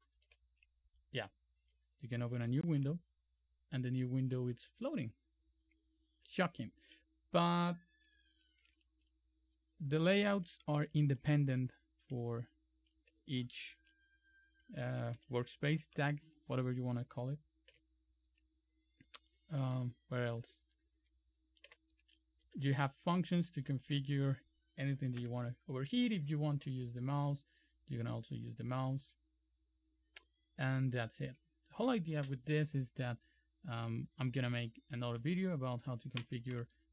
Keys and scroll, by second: 2.5 super+e, 8.8 super+m, 10.1 super+3, 10.4 super+4, 11.7 super+3, 12.3 super+2, 13.3 super+3, 15.3 super+c, 21.7 super+y, 22.5 Up, 22.9 Up, 23.5 Down, 23.7 Down, 23.9 Down, 24.1 Down, 24.3 Down, 25.3 Escape.